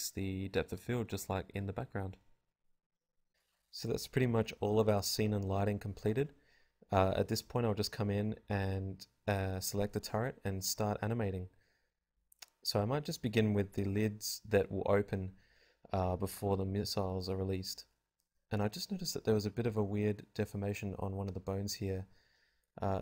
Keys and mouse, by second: 0.0 ctrl+Up, 1.4 F11, 2.9 z, 3.2 z, 6.4 ctrl+Tab, 7.0 KP_Decimal, 11.5 ctrl+z, 12.1 ctrl+z, 14.1-16.5 drag, 16.6 ctrl+z, 16.7 ctrl+z, 16.9 ctrl+z.